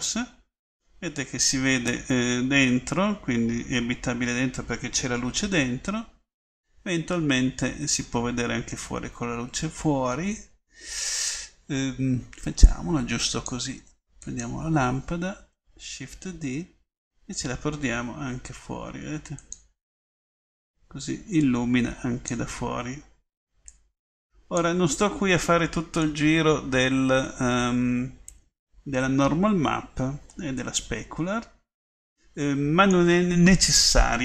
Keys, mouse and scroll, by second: 2.1 click, 9.0-10.1 middle drag, 16.5 shift+d, 26.4 middle click, 26.6-28.4 middle drag.